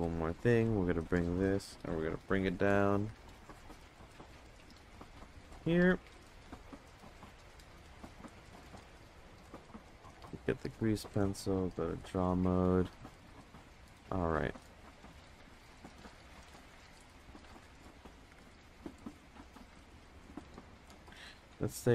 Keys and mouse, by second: 2.1 g, 6.5 Tab, 7.1 Tab, 11.3-11.8 drag, 13.7 ctrl+space, 15.4 click, 17.1 ctrl+z, 17.3 click, 18.2 ctrl+z, 18.6 click, 19.8 ctrl+z, 20.1 click, 21.0 ctrl+z, 21.6 click.